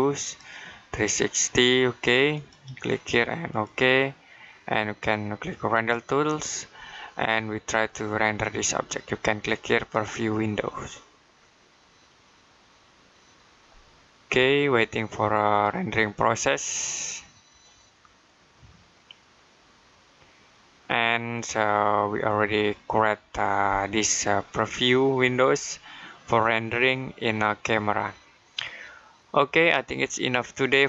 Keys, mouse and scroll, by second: 9.7 click.